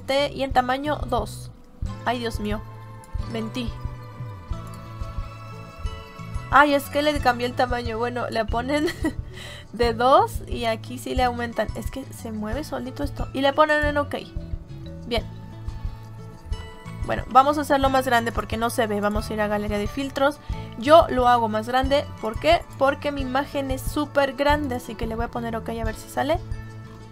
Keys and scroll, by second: 17.0 ctrl+z.